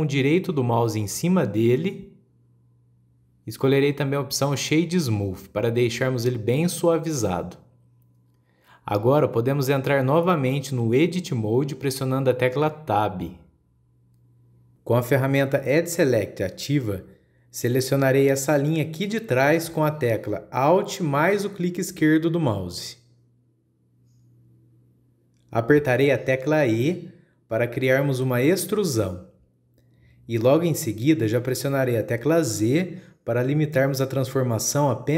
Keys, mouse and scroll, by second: 0.3-1.1 middle drag, 1.1-1.6 scroll down 1, 1.6 scroll down 1, 1.9-2.5 middle drag, 2.5-5.7 right drag, 7.1-7.7 scroll up 2, 7.7-9.7 middle drag, 9.7-12.7 scroll down 1, 13.8 Tab, 17.5 click, 17.9 scroll down 2, 18.0 scroll up 1, 18.2-21.2 middle drag, 23.0 alt+click, 24.1-25.0 scroll down 2, 25.0 KP_1, 25.8-28.1 middle drag, 28.1 e.